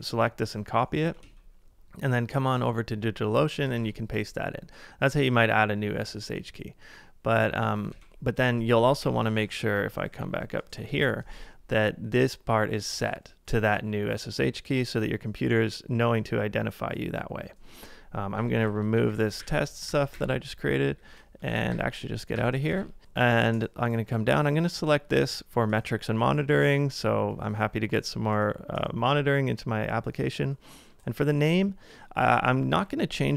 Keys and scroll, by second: 0.7 typing, 1.2 super+Tab, 3.8 super+v, 7.9 super+Tab, 8.9 Up, 9.0 Up, 9.3 Up, 10.9 Return, 18.3-19.9 typing, 21.5 ctrl+a, 21.5-22.3 typing, 22.7 super+Tab, 32.8 BackSpace.